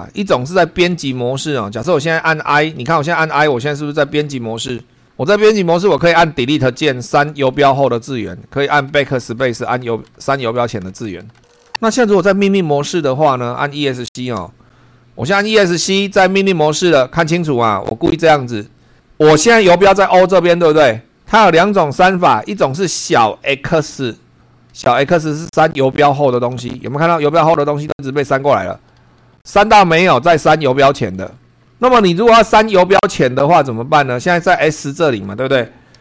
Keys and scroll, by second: 0.0 super+3, 1.4 Up, 3.0 Down, 4.2 i, 5.3 Up, 6.0 Right, 7.2 Delete, 8.9 BackSpace, 14.3 Escape, 17.4 Down, 18.6 Right, 24.7 x, 30.0 x, 31.6 Down, 32.0 Right, 33.5 Up.